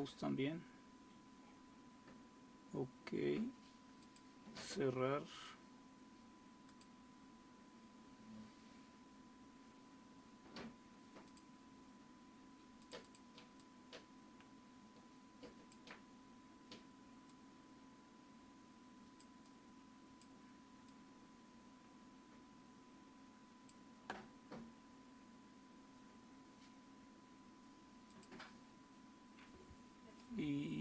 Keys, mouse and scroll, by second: 0.0 click, 4.3-9.2 drag, 11.4-17.8 drag, 18.5 click, 21.4-26.2 drag, 28.2-29.3 drag.